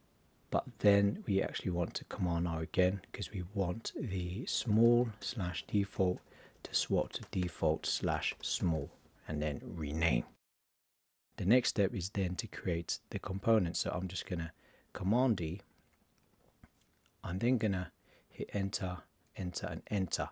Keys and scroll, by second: 2.2 super+r, 4.5 shift+s, 5.5 shift+d, 7.0 shift+d, 8.1 shift+s, 15.0 super+d.